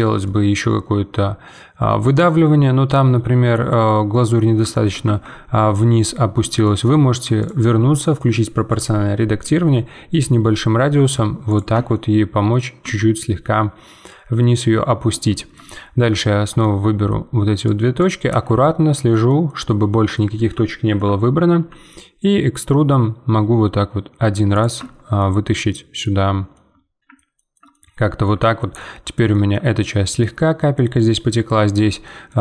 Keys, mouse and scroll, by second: 0.0 scroll down 1, 0.2-2.3 middle drag, 2.3 scroll down 2, 2.6-3.7 middle drag, 3.7-4.1 scroll down 1, 4.1 middle click, 5.0 Tab, 6.0-7.1 middle drag, 7.1 1, 7.4-9.4 drag, 9.4 g, 11.7 Tab, 11.9 middle click, 12.8 Tab, 15.3-17.6 shift+middle drag, 17.6 click, 18.3 z, 18.6-20.2 middle drag, 20.2 z, 20.6 shift+middle click, 21.5 e, 24.8 Tab, 25.2 middle click, 26.0-26.5 scroll down 2, 26.5-31.5 middle drag, 31.5-32.0 scroll down 2, 32.0-32.4 shift+middle drag.